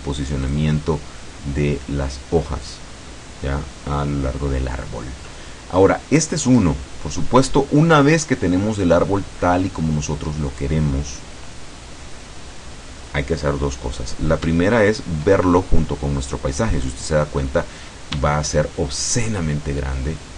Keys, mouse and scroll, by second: 0.5 click, 2.7 click, 5.3-6.4 middle drag, 6.5 right click, 7.3-7.9 scroll up 1, 7.9-8.7 scroll down 1, 8.7-9.0 scroll up 1, 15.5-15.8 shift+scroll down 2, 16.0 scroll down 2, 16.9 click, 19.1 shift+click.